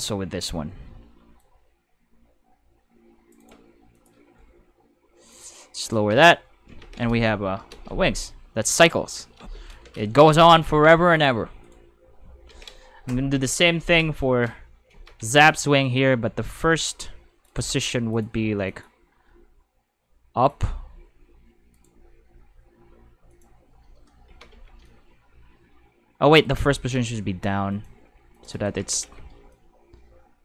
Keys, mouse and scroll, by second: 0.0-0.1 typing, 1.4-3.3 drag, 3.9 click, 4.1-5.0 typing, 5.8 click, 6.1 Tab, 6.8 ctrl+s, 7.7 space, 7.8 5, 9.4 space, 10.7 ctrl+Tab, 11.1 click, 11.6 right click, 13.3 Tab, 14.8-15.8 typing, 15.8-17.4 drag, 18.1 click, 18.6 click, 19.2 r, 20.4 click, 20.7 g, 21.7 right click, 22.2 g, 23.3 click, 24.3 alt+a, 24.5 c, 24.8-26.3 drag, 26.4-26.9 right drag, 26.9 r, 27.7 click, 27.9 g, 28.3 click, 28.8 alt+a, 29.0 c, 29.5-30.4 drag.